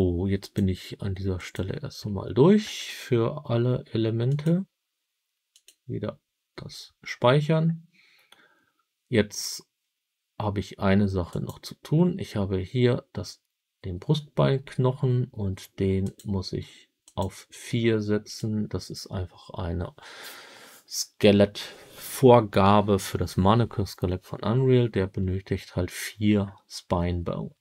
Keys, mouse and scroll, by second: 0.3-1.8 drag, 11.2 click, 15.9-18.4 drag.